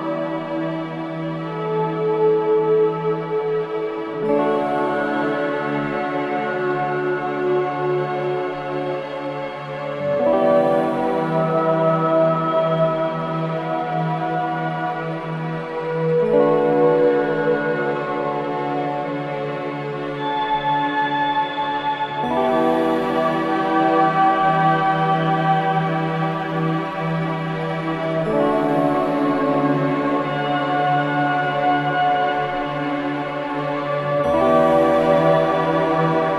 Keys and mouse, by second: 1.2-3.4 drag, 7.1 click, 8.3 click, 10.2-15.2 drag, 16.9-17.6 drag, 21.6-29.4 drag, 29.5 ctrl+s, 30.3-31.0 drag, 33.7 click.